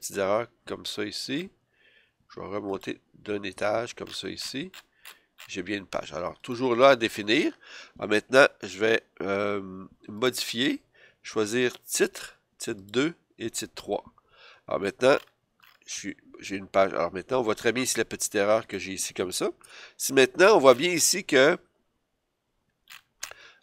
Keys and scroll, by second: 3.5 BackSpace, 19.6 BackSpace.